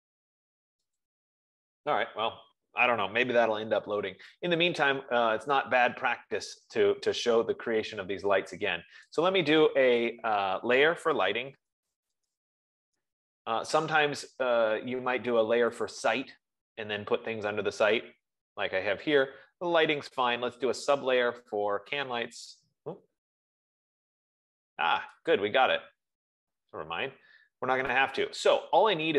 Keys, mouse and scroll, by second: 1.8-6.4 drag, 9.7 click, 11.8-13.4 typing, 16.3 click, 19.4 click, 21.6 click, 26.2 click.